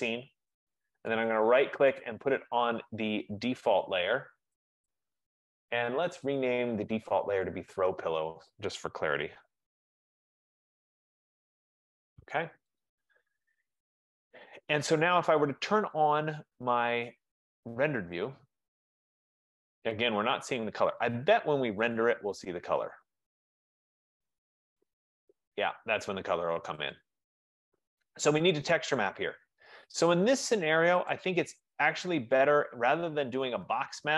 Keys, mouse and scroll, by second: 0.0 click, 1.3 right click, 4.8 click, 7.6 click, 8.0 click, 9.2-11.5 typing, 11.6 Return, 12.9 click, 14.5 click, 15.8 typing, 16.1 click, 18.4 click, 19.6 middle click, 19.7 middle click, 20.0-21.2 scroll, 21.4 middle click, 22.1 click, 26.1 click, 27.2 click, 29.1 right click, 29.3-30.2 scroll down 4, 30.2-30.6 scroll up 3, 30.6 F15, 31.2 click.